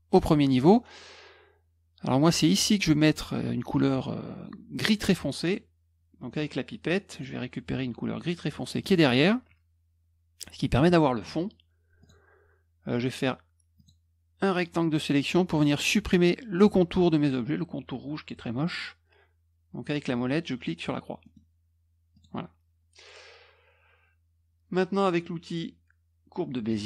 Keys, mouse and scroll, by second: 2.1 click, 7.1 click, 8.8 click, 12.0 click, 13.7 click, 14.5-15.6 drag, 21.2 middle click, 22.1 click, 26.7 click.